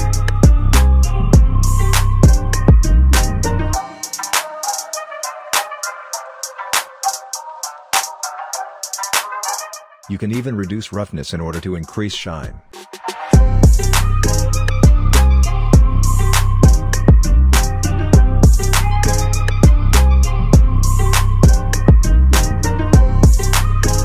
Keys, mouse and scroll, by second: 0.4-2.0 scroll down 1, 8.6-16.3 drag, 17.6 click, 19.6 scroll down 1, 21.1 r, 21.9-24.0 drag.